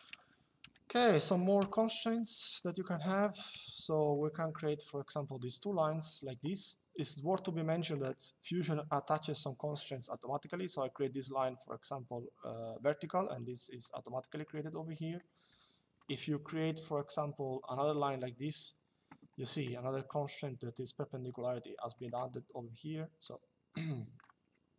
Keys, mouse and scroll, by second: 0.3 Delete, 1.3 click, 2.4 Escape, 3.2 click, 4.5 Escape, 13.5 click, 15.7 click, 16.8 click, 18.3 Escape, 22.9 click, 24.6 Delete.